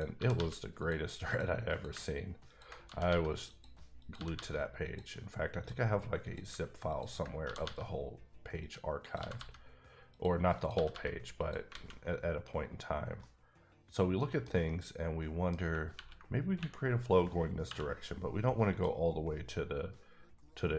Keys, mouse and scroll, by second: 0.1 g, 0.3 g, 0.8 click, 1.3 click, 1.9 click, 2.5 ctrl+click, 2.8 click, 2.8 g, 3.0 g, 3.5 click, 4.0 click, 4.1 g, 4.3 g, 4.8 click, 5.6 click, 6.4 click, 6.9 ctrl+click, 7.4 g, 7.6 g, 8.6 click, 9.0 click, 9.2 g, 9.3 g, 10.1 click, 10.5 click, 10.7 g, 10.9 g, 11.4 click, 11.7 alt+a, 12.8-13.2 scroll down 1, 13.2-14.6 middle drag, 14.6 middle click, 15.9 ctrl+r, 17.7 k, 18.7 click.